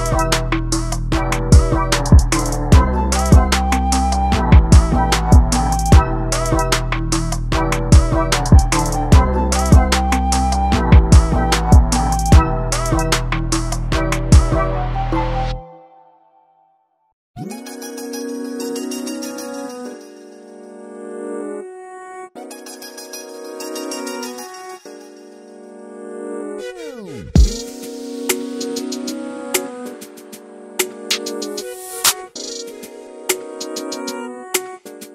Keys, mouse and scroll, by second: 0.7 z, 0.8 middle click, 0.9 scroll down 2, 1.0-1.3 scroll up 3, 1.1 shift+middle click, 1.3 middle drag, 1.5 shift+right click, 1.7-2.9 shift+middle drag, 2.9 shift+a, 3.8 s, 3.9 s, 5.1 KP_Decimal, 5.4 middle click, 6.0 /, 6.1 KP_1, 6.3 scroll up 1, 6.5 scroll down 1, 6.7 Tab, 6.8 scroll up 1, 7.2 scroll down 1, 7.5 click, 9.6 click, 9.8 click, 10.0-10.5 scroll down 2, 10.1 middle click, 10.5 shift+middle click, 10.9 click, 11.2 scroll down 1, 11.3 middle click, 11.8 Tab, 11.9 scroll up 1, 12.0 middle click, 12.2 KP_1, 12.5 KP_3, 12.9 right click, 13.1 shift+middle click, 13.5 shift+d, 14.0 shift+middle click, 14.1 scroll up 1, 14.2 Tab, 14.4 click, 14.7 g, 15.3 click, 15.7 g, 16.1 click, 16.1 g, 16.6 click, 16.9 click, 17.7 click, 18.2 click, 18.4 click, 18.6 click, 18.7 click, 18.9 click, 19.7 a, 21.9 scroll down 2, 22.0-22.9 scroll up 3, 22.4 shift+r, 22.9 click, 23.2 click, 24.4 Tab, 24.5 scroll down 1, 24.6 alt+a, 24.8 click, 24.9 shift+middle click, 25.2 shift+d, 25.7-26.0 scroll up 3, 25.8 shift+middle click, 26.0 Tab, 26.3 click, 26.5 click, 28.7 click, 29.0 click, 29.7 click, 29.9 click, 30.2 scroll down 2, 30.3 shift+middle click, 30.5 click, 30.7 click, 31.9 a, 32.4 s, 33.0 r, 33.1 scroll down 2, 33.2 scroll up 1, 33.4 scroll down 1, 33.5 Tab, 33.7 alt+a, 33.9 shift+middle click, 34.0 scroll up 1, 34.2 shift+middle click, 34.3 click, 34.6 shift+d, 35.0 Tab.